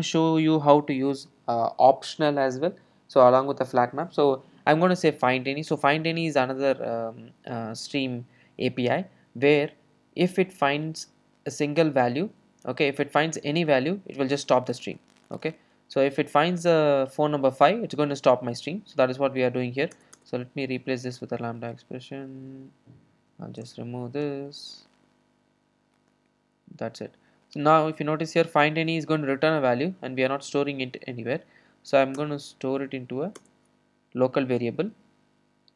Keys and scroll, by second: 20.0 alt+Return, 32.2 alt+Return.